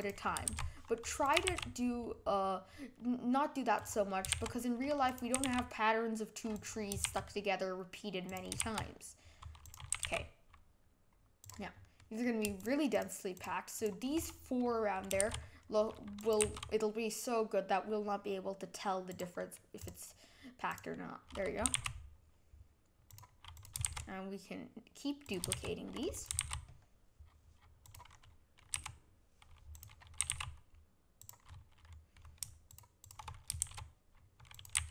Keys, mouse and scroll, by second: 0.0 click, 0.5 shift+d, 1.4 g, 4.3 shift+d, 5.3 g, 7.0 shift+d, 8.6 shift+d, 9.9 g, 11.7 scroll down 2, 12.0 middle click, 12.6 shift+click, 12.9 shift+click, 13.3 shift+click, 13.7 shift+click, 15.2 shift+d, 16.4 g, 19.4 middle click, 19.8 click, 20.7 click, 20.9 middle click, 21.6 g, 23.5 click, 23.8 shift+d, 25.5 shift+d, 26.3 g, 28.1 scroll up 1, 28.2 middle click, 28.7 g, 30.2 g, 31.5-32.7 middle drag, 32.7 shift+click, 33.0 shift+click, 33.6 shift+d, 34.7 g.